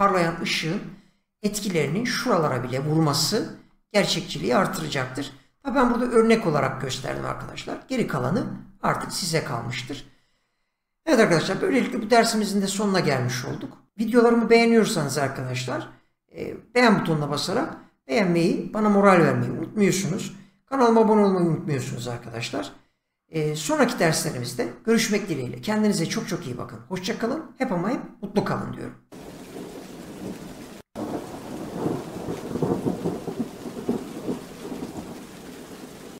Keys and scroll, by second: 29.1 space.